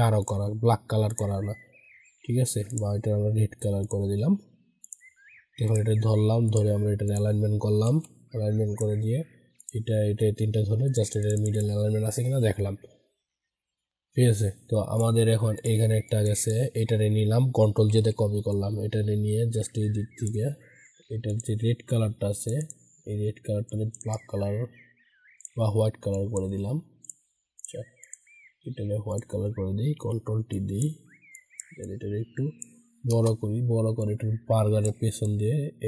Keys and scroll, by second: 7.8 ctrl+g, 17.9 ctrl+j, 29.9 ctrl+t.